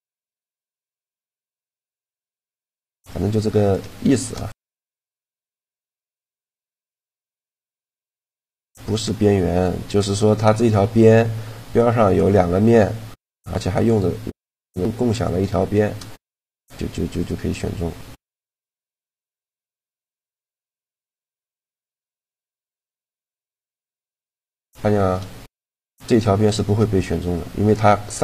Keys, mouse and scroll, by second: 2.3 a, 3.4-5.0 right drag, 3.8 shift+g, 5.0 shift+g, 10.2-12.1 right drag, 13.8-17.6 middle drag, 19.7-21.2 right drag, 20.2 e, 21.4-23.1 middle drag, 22.6 a, 23.1 right click, 23.4 shift+g.